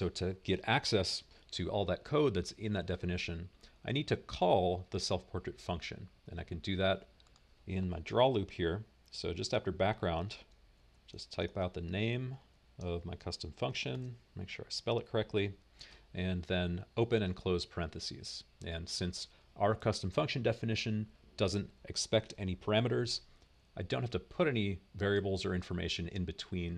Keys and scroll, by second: 10.7-17.3 typing.